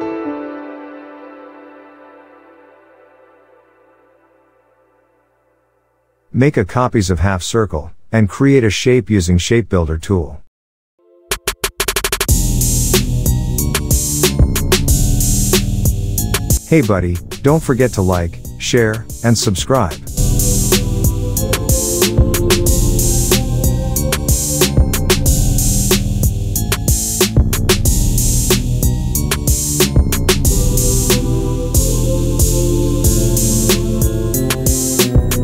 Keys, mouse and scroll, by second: 3.9 ctrl+c, 4.2 ctrl+f, 5.0 click, 7.5 alt+scroll up 1, 7.7-9.3 drag, 9.4 alt+scroll up 1, 9.9-10.9 alt+drag, 15.5 click, 15.8-16.6 alt+scroll down 2, 17.0 alt+click, 19.2-20.2 alt+scroll up 2, 20.5-21.4 alt+click, 21.6-22.3 alt+scroll down 2, 22.3 click, 23.3-24.1 alt+scroll up 2, 24.1-26.5 drag, 27.1 click, 30.2 space, 30.5 click, 30.6 space, 31.5-33.0 drag, 34.8 alt+scroll down 1, 35.1 space.